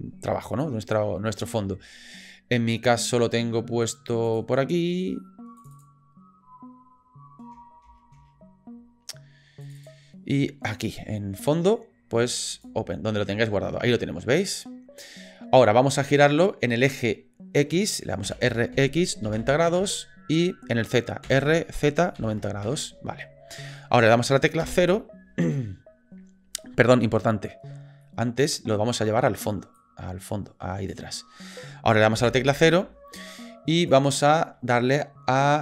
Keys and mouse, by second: 13.2 click, 18.2 r, 21.2 r, 24.7 KP_0, 28.1 middle click, 29.8-30.9 drag, 32.2 KP_0, 33.9 click.